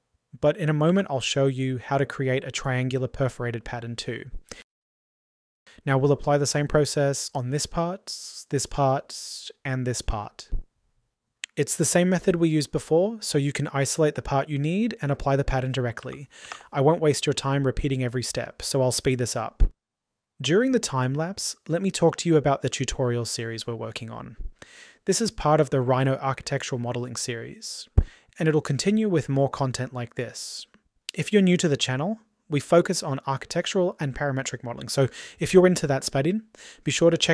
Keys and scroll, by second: 35.8 Delete, 37.0 Delete.